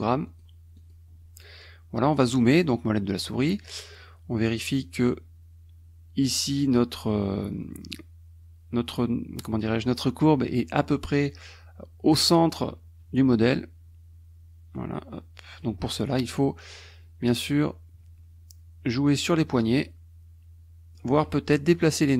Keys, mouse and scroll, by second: 0.3 click, 0.8 click, 2.5 middle click, 3.0 middle click, 4.8-6.8 drag, 14.8-15.8 drag, 15.8 middle click, 19.6-21.4 drag, 22.0-22.1 drag.